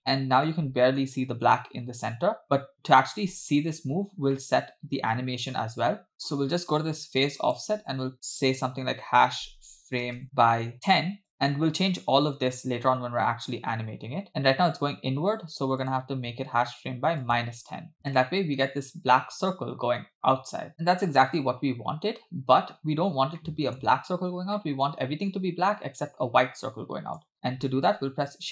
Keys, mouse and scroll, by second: 0.0 scroll up 4, 0.5-1.0 middle drag, 1.4-1.9 scroll up 2, 2.0 scroll down 3, 2.7 scroll down 2, 4.4 middle click, 7.4-11.3 drag, 12.9 space, 15.3 space, 15.9-18.0 drag, 18.0 space, 20.7 middle click, 22.8-23.4 scroll up 2, 23.4 middle click, 24.6 middle click, 26.6-27.2 scroll down 2, 27.3 click, 27.9 shift+a.